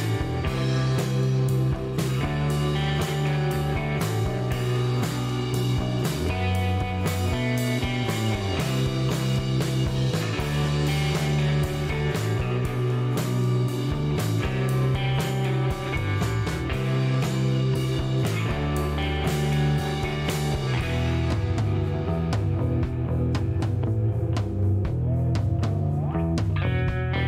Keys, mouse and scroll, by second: 1.0 shift+right click, 2.2-2.7 shift+middle drag, 3.9 click, 5.4 scroll down 1, 5.7 shift+right click, 8.2 click, 9.6 shift+right click, 10.7 shift+right click, 11.5 shift+middle click, 12.0 scroll up 2, 12.4 scroll down 1, 12.8 shift+middle click, 13.2 shift+right click, 14.3-14.8 middle drag, 17.8 click, 18.8 ctrl+click, 20.4 ctrl+click, 22.0 ctrl+click, 22.5 ctrl+shift+right click, 24.7 ctrl+click, 26.1 ctrl+click.